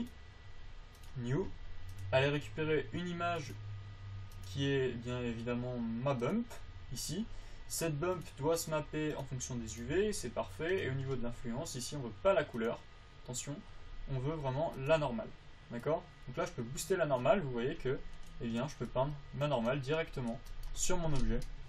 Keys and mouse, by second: 2.0-4.7 drag.